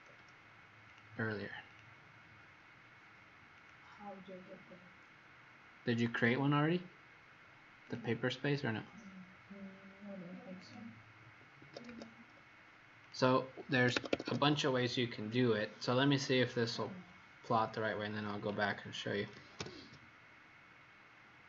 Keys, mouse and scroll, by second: 0.8 click, 11.1 Escape, 11.6 Escape, 13.0 click, 13.5 Escape, 13.7 Escape, 19.5 ctrl+p.